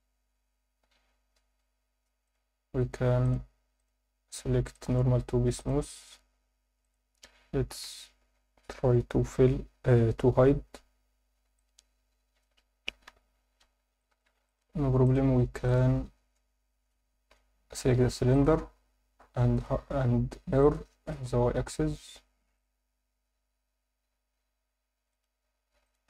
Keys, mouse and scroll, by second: 2.2-3.3 drag, 3.8 click, 4.7 click, 6.8 click, 10.8 scroll down 1, 11.4 scroll down 3, 11.5-12.4 alt+middle drag, 13.0 KP_7, 14.0 shift+middle drag, 14.5 ctrl+alt+middle click, 15.0 click, 15.7 click, 17.3 alt+h, 18.3 click, 19.5 click, 20.6-22.7 drag, 25.1 click.